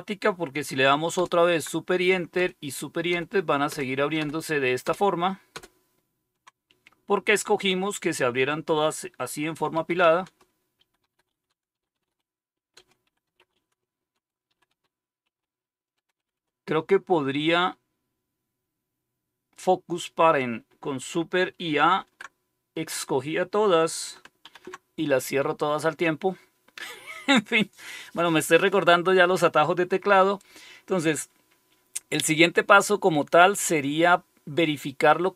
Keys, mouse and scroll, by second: 1.1 super+Return, 2.3 super+Return, 3.0 super+Return, 9.5-9.8 super+Return, 9.9-16.3 typing, 21.9 super+a, 24.4 shift+super+c.